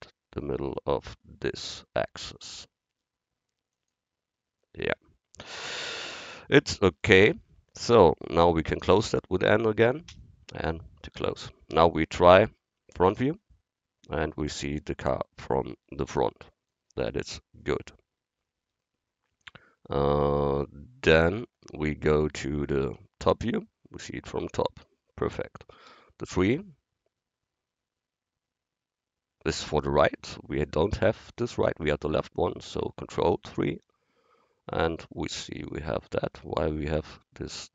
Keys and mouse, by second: 10.1 n, 13.2 KP_1, 17.6-19.9 middle drag, 21.4-23.0 middle drag, 23.0 KP_7, 25.9 KP_3, 28.0 KP_3, 33.5 ctrl+KP_3.